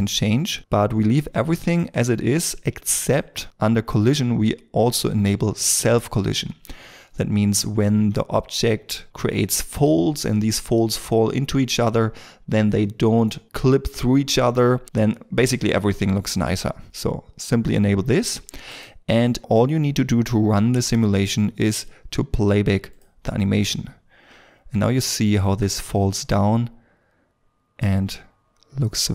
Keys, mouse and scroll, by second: 4.2-5.7 scroll down 1, 28.9 middle click.